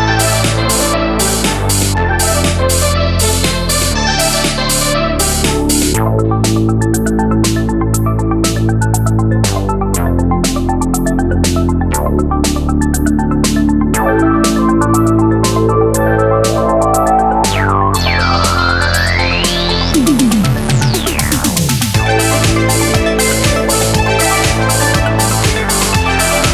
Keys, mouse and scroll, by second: 0.1 KP_0, 0.4 super+z, 0.6 super+z, 2.0 alt+click, 2.8 KP_7, 3.1 super+click, 3.2 super+z, 3.5 super+z, 3.6 click, 3.8 super+z, 3.9-4.3 super+drag, 4.0 super+z, 4.2 super+z, 5.9 super+z, 6.5 super+s, 6.6 n, 7.1 click, 7.7 super+z, 7.7 click, 7.8 click, 8.9 super+z, 9.0 super+z, 9.9 click, 10.2 super+z, 10.3 super+z, 10.4 click, 11.1 ctrl+click, 11.6 middle click, 11.9 ctrl+click, 12.7 ctrl+super+click, 12.8 super+z, 12.9 super+z, 13.1 super+z, 14.2 super+click, 14.2 super+z, 14.7 super+z, 14.8 click, 14.9 super+z, 15.2 click, 15.5 super+z, 15.5 super+click, 16.2 shift+click, 16.6 shift+click, 16.7 shift+click, 18.7 click, 19.0 super+click, 21.7 KP_7, 21.9 click, 22.5 super+z, 22.5 KP_3, 22.7 click, 22.8 super+z, 22.9 click, 23.1 super+z, 23.4 super+z, 23.4 click, 24.0 super+z, 24.1 KP_7, 24.9 KP_7, 25.6 a, 25.8 KP_7, 26.2 alt+KP_1.